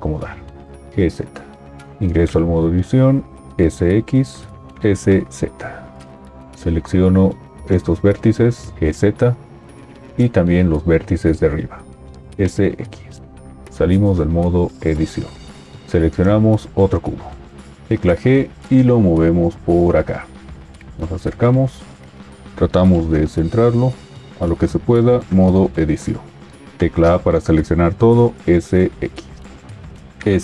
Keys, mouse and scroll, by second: 0.8 g, 2.3 Tab, 3.6 s, 3.6 x, 5.0 s, 5.0 z, 8.7 g, 8.7 z, 12.2 s, 13.8 Tab, 17.8 g, 24.8 Tab, 26.7 a, 28.5 s, 30.1 s, 30.1 z.